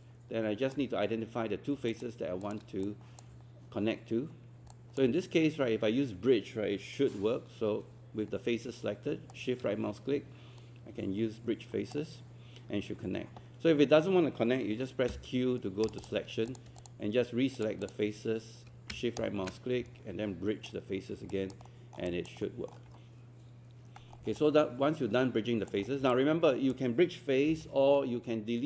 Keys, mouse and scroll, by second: 1.9 shift+click, 2.4 shift+click, 2.8 alt+click, 4.4 scroll up 1, 4.7-6.0 alt+drag, 9.3-12.0 shift+right drag, 15.1 q, 15.9 click, 16.8 shift+click, 17.6 shift+click, 17.8 shift+click, 19.2-21.0 shift+right drag, 21.3 alt+click, 21.7 alt+middle click, 24.2 scroll down 2, 25.8 scroll up 1, 26.1 alt+click.